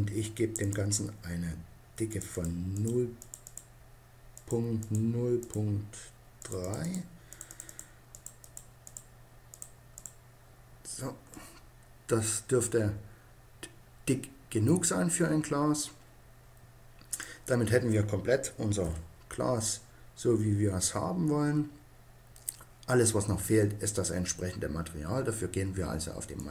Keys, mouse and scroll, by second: 0.3-11.4 drag, 11.4 middle click, 16.9-18.6 drag, 18.6 KP_0, 26.1-26.5 drag.